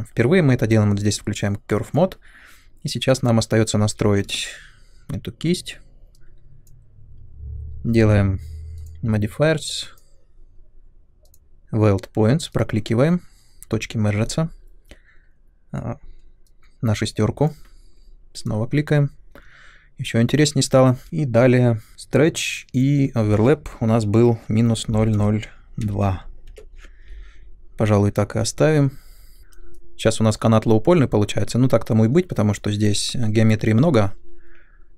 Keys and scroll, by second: 3.8 shift+f, 24.2-26.9 typing.